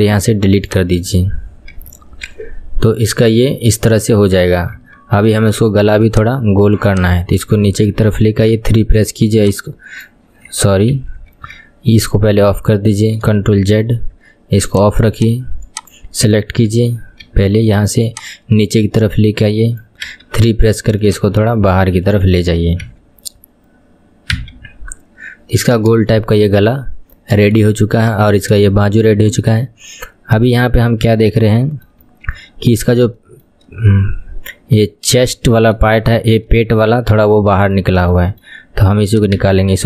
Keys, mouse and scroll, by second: 0.8-1.8 right drag, 1.8 Tab, 2.5-3.4 scroll down 6, 3.4-4.2 scroll up 3, 4.9 Tab, 5.3-6.5 scroll up 2, 6.5 Left, 7.0 click, 8.6 KP_3, 10.1 click, 11.0 ctrl+z, 11.4 KP_1, 13.7 ctrl+z, 14.9 click, 16.0 click, 16.8 KP_3, 17.3 KP_1, 18.2 click, 20.2 KP_3, 21.2 click, 22.9 KP_1, 24.4 Tab, 24.7-25.8 scroll down 1, 25.8-26.5 scroll down 5, 26.5-28.3 shift+middle drag, 28.3-28.8 scroll up 2, 28.8-32.1 shift+middle drag, 32.1 KP_1, 32.9-33.2 scroll down 2, 33.2-35.7 shift+middle drag, 35.7 scroll up 1, 36.0-37.2 shift+middle drag, 37.2 KP_3, 37.8-39.2 shift+middle drag, 39.2 click, 39.4 Tab.